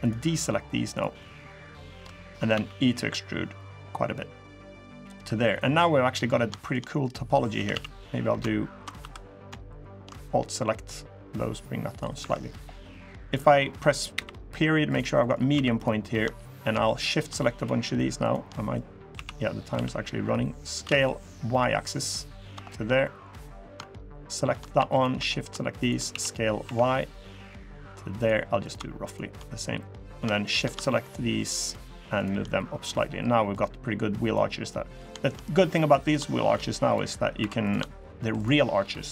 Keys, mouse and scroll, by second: 0.1 shift+click, 0.7 shift+click, 0.9 shift+click, 1.3 shift+click, 1.5 shift+click, 2.3 e, 4.6 middle click, 4.8 scroll up 3, 5.2 middle click, 5.5 scroll down 2, 5.8 middle click, 6.3 shift+middle click, 6.6 middle click, 7.3 a, 7.5 a, 8.7 2, 9.4 alt+shift+click, 10.7 click, 11.9 3, 12.4 scroll down 1, 13.0 click, 14.9 middle click, 15.3 2, 15.5 click, 16.3 shift+click, 16.6 middle click, 16.8 scroll up 2, 17.3 shift+click, 18.0 shift+click, 18.3 middle click, 18.9 s, 22.4 shift+middle click, 22.8 middle click, 23.3 click, 23.9 shift+click, 24.7 click, 25.0 middle click, 25.5 shift+click, 25.8 s, 28.4 click, 28.8 shift+click, 29.8 click, 30.2 shift+click, 30.6 shift+middle click, 31.4 shift+click, 31.9 shift+click, 33.3 click, 34.3 scroll down 1, 34.4 middle click, 34.9 shift+middle click, 35.2 scroll up 1, 35.3 3, 35.8 click, 36.6 click, 37.1 2, 37.4 click, 37.7 shift+click, 38.1 shift+click, 38.9 click.